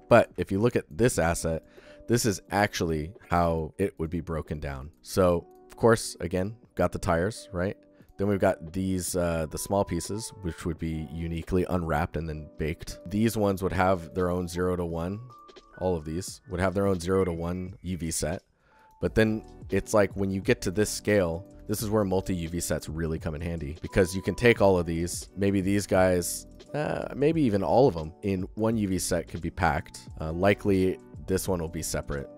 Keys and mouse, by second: 0.0 ctrl+alt+drag, 0.3 alt+shift+click, 0.9 alt+middle drag, 1.1 ctrl+alt+click, 1.2 ctrl+alt+middle click, 1.4 alt+middle click, 1.6 alt+shift+middle click, 2.2 alt+shift+click, 2.6 middle click, 2.6 alt+click, 2.8 alt+shift+click, 4.6 alt+shift+click, 4.9 alt+shift+middle click, 6.1 click, 13.1 shift+click, 13.9 shift+click, 14.7 click, 15.1 shift+click, 18.6 click, 19.7 click, 20.0-20.3 alt+shift+middle drag, 20.4 alt+middle click, 21.1 shift+middle click, 21.4 alt+middle click, 25.7 click, 26.3 click, 27.2 alt+shift+middle click, 27.5 alt+middle click, 27.7-28.1 shift+middle drag, 28.2 alt+shift+middle click, 28.5 alt+shift+middle click, 29.2 alt+middle click, 29.8 alt+shift+middle drag, 30.4 click.